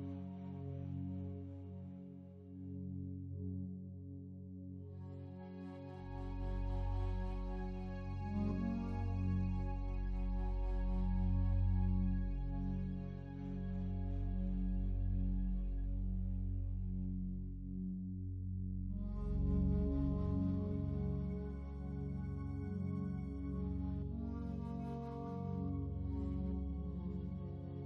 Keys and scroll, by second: 7.6 ctrl+z.